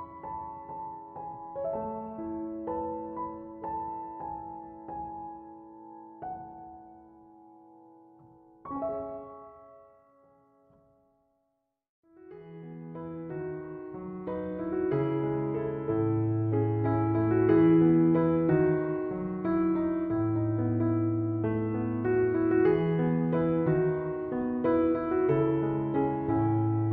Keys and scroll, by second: 7.5-8.4 typing, 26.2 1, 26.5 8, 26.8 Return.